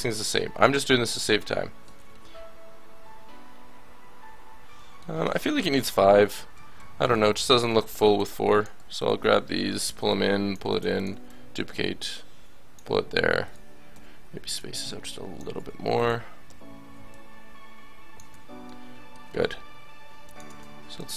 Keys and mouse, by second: 1.2 a, 1.9 Tab, 5.6 KP_7, 5.8 Tab, 6.5 a, 6.7 a, 7.5 l, 8.7 a, 9.5 l, 10.7 shift+d, 12.9 a, 13.9 l, 14.6 click, 15.5 a, 16.0 click, 16.4 l, 17.1 click, 18.3 Tab, 18.6-19.6 drag, 20.2-21.1 drag.